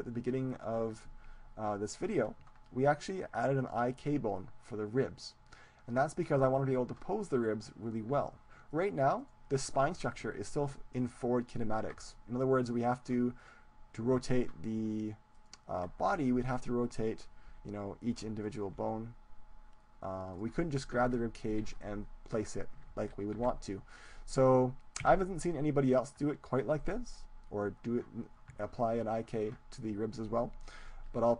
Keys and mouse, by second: 3.7-5.5 right drag, 8.8-11.1 right drag, 13.4-20.2 right drag, 17.6 r, 18.0-20.2 drag, 19.2 r, 20.8-23.4 drag, 21.2 ctrl+z, 22.8 ctrl+z, 23.4 ctrl+z, 25.2 Tab.